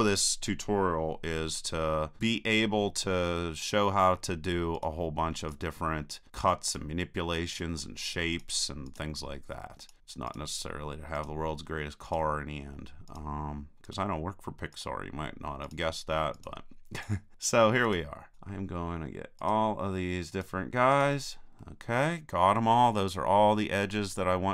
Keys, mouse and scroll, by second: 1.5-2.8 middle drag, 2.9-4.7 middle drag, 4.7-21.6 right drag, 21.6-24.5 middle drag.